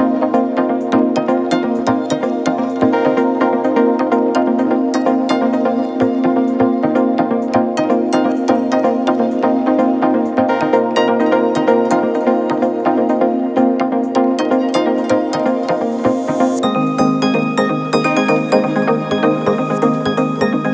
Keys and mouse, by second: 6.3 shift+click, 7.2 g, 8.3 click, 9.1 Tab, 10.1 click, 11.1 g, 13.5 shift+drag, 14.0-14.7 drag, 14.9-15.4 shift+drag, 15.6-16.0 middle drag, 16.4-18.1 shift+middle drag.